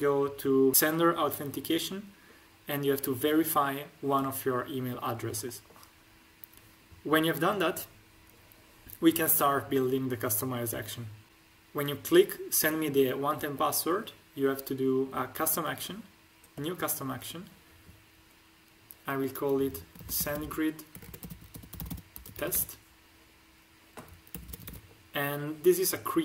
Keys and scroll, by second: 19.9-22.5 typing, 24.3 BackSpace, 24.4 e, 24.5 s, 24.6 t.